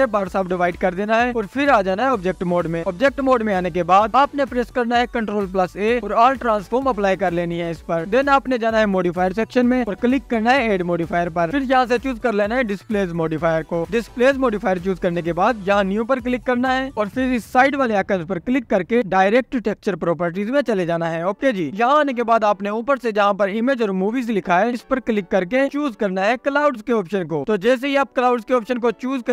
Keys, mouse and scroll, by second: 0.0-0.9 drag, 0.4-3.1 right drag, 17.1-19.4 drag, 22.1-28.0 drag, 28.6-29.3 scroll down 2.